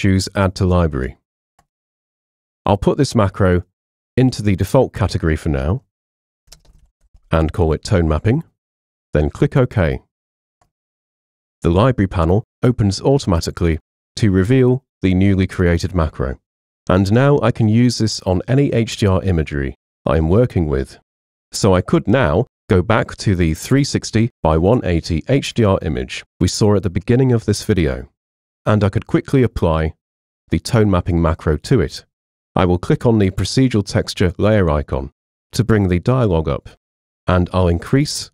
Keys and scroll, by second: 5.8-7.7 typing, 25.3 super+0.